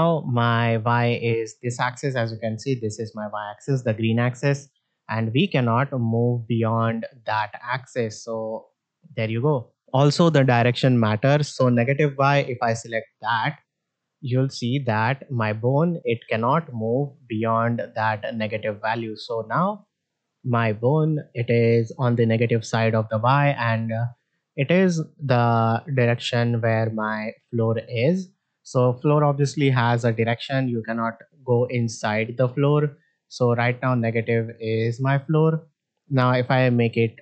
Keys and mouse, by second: 4.4-6.6 drag, 7.6-9.8 drag, 12.7 click, 14.2-16.7 drag, 17.3-19.6 drag, 20.7-21.0 shift+middle drag, 21.9-35.1 drag.